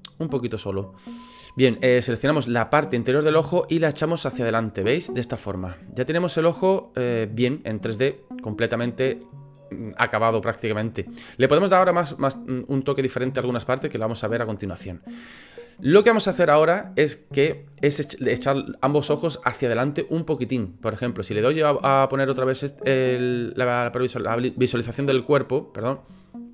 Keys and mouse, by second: 1.0 middle click, 3.0 middle click, 3.9-4.9 drag, 5.3 click, 5.6-7.6 middle drag, 8.0 middle click, 15.7 middle click, 21.4 click.